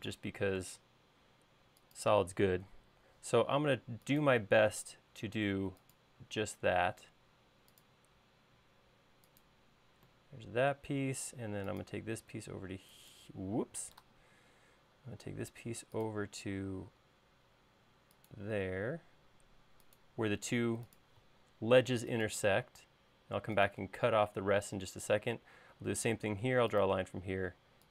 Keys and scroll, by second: 1.0 l, 2.9 Up, 7.0 l, 14.1 super+z, 25.7 l.